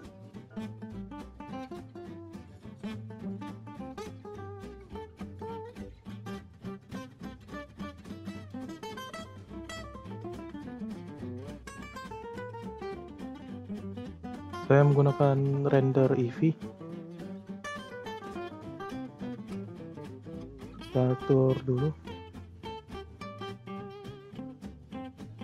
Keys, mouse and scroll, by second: 8.7-9.5 scroll up 7, 9.5 shift+middle drag, 9.8 scroll up 4, 10.3-12.0 middle drag, 12.0 click, 12.8-15.9 drag, 16.8 click, 17.3-17.6 drag, 17.6 scroll down 2, 19.6 click, 19.9-20.2 drag, 20.2-21.0 scroll down 1, 21.0-21.9 scroll up 4, 21.9-22.5 scroll up 1, 22.5-22.9 scroll down 2, 23.6-25.4 drag.